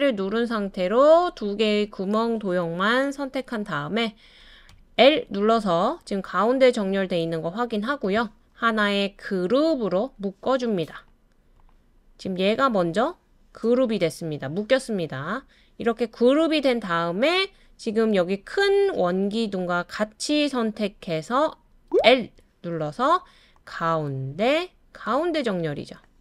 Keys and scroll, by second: 21.9 typing.